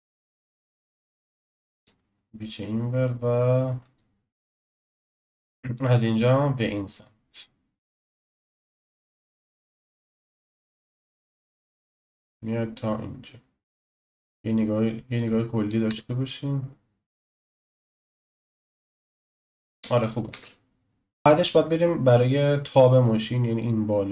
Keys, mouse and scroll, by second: 1.1-3.9 drag, 3.9-5.7 shift+middle drag, 5.7 click, 9.2-9.6 scroll down 1, 9.6-10.8 shift+middle drag, 10.8-13.9 drag, 15.8 space, 20.3 space, 21.2-22.2 shift+middle drag, 22.2-22.7 scroll up 2, 22.7-23.6 shift+middle drag, 23.6 click.